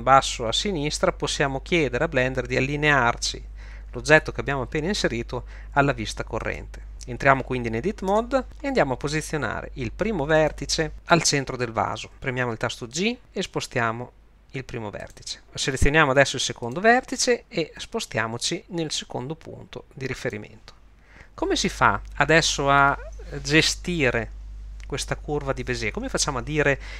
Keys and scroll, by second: 8.1 Tab, 13.0 g, 18.2 g.